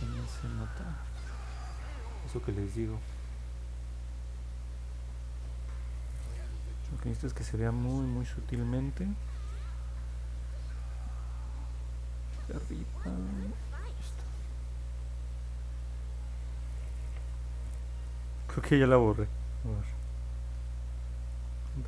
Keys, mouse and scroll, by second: 0.6 click, 1.4 click, 1.7 click, 2.2 click, 2.6 click, 3.1 click, 4.8 click, 6.3 click, 10.8 click, 11.1 click, 11.6 click, 12.4 click, 13.0 click, 13.3 click, 13.6 click, 13.9 click, 14.3 click, 14.5 click, 18.2 ctrl+z, 21.2 ctrl+z, 21.6 ctrl+z.